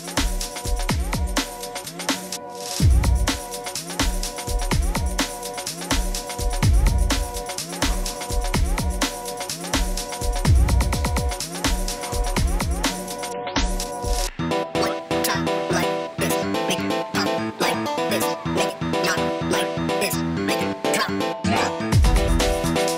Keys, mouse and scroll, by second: 0.9 click, 7.0 click, 10.5 click, 14.4 click, 22.0 click.